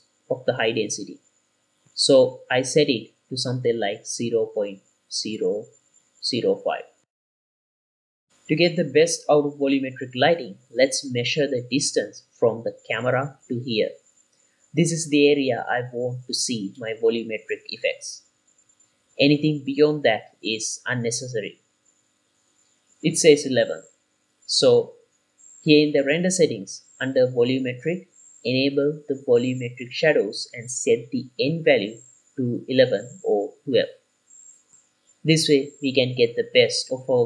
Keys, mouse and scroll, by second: 1.6 click, 4.3-4.9 scroll up 5, 4.6 shift+middle click, 4.9 click, 6.4 shift+click, 7.7 BackSpace, 8.1 click, 8.1 shift+middle click, 8.1 scroll down 2, 9.9-10.5 scroll down 1, 10.5 scroll down 3, 10.6 KP_7, 11.0-11.5 scroll up 3, 11.3 shift+middle drag, 12.5 click, 13.4-16.6 drag, 24.0 click, 25.3 x, 27.2 click, 28.6 click, 30.6 click, 32.1-34.2 drag, 33.8 KP_1, 34.7 click.